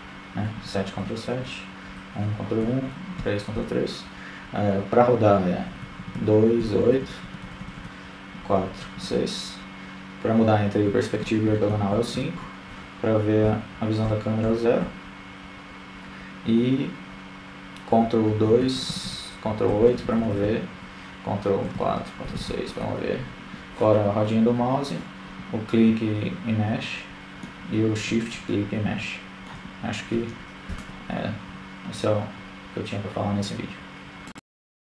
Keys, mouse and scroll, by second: 0.0 KP_7, 1.3 KP_1, 2.0 ctrl+KP_1, 2.7 KP_3, 5.4-9.3 typing, 11.1-12.4 typing, 13.8 KP_0, 14.3 KP_0, 14.7 KP_0, 15.2 KP_0, 18.6-19.0 ctrl+KP_2, 19.2 ctrl+KP_2, 19.5 ctrl+KP_2, 20.2-20.6 ctrl+KP_8, 20.8 ctrl+KP_8, 22.0 ctrl+KP_4, 22.6 ctrl+KP_6, 22.9 ctrl+KP_6, 24.0-27.0 middle drag, 29.0-31.5 middle drag, 31.5 shift+space.